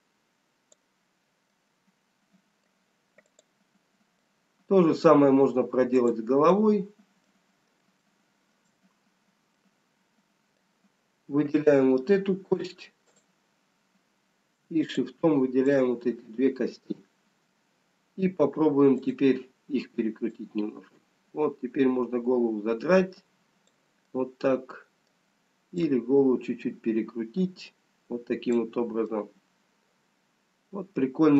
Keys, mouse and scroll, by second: 1.5 middle click, 3.1 click, 5.0 middle click, 5.0 scroll down 3, 9.6 shift+middle click, 12.9 click, 13.7 click, 14.7 shift+click, 16.6 shift+click, 19.4 click, 20.5 click, 26.7 middle click, 26.7 click, 29.1 middle click.